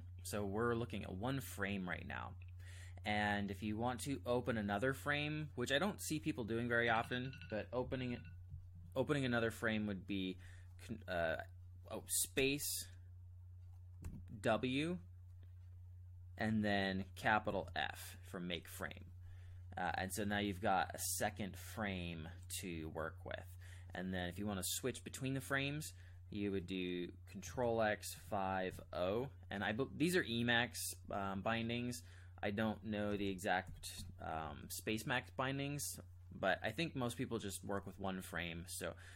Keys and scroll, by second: 12.3 space, 14.0 w, 17.5 shift+f, 27.5 ctrl+x, 28.1 5, 28.8 o, 33.1 ctrl+x, 33.6 5, 34.1 o.